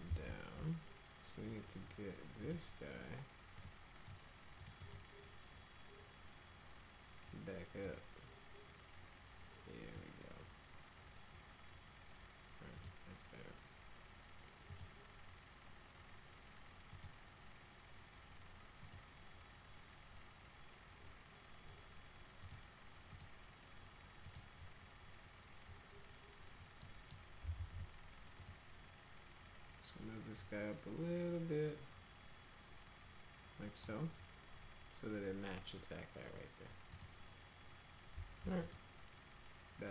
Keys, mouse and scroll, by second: 0.0 ctrl+z, 2.4 click, 3.6 click, 4.0 click, 4.6 click, 4.8 click, 7.8-9.9 drag, 12.7 click, 14.7 click, 16.9 click, 18.8 click, 22.4 click, 23.1 click, 24.2 click, 26.8 middle click, 27.6 alt+x, 28.3 click, 30.3-33.8 drag, 36.9 click, 38.6 click.